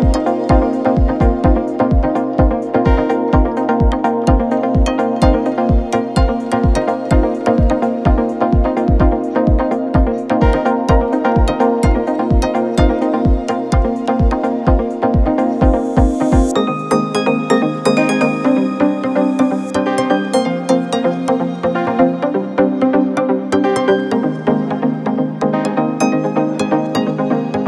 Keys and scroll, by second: 6.5 2, 6.9 ], 12.1 ], 13.9 4, 19.2 2, 20.4 f, 24.9 4, 25.7 2.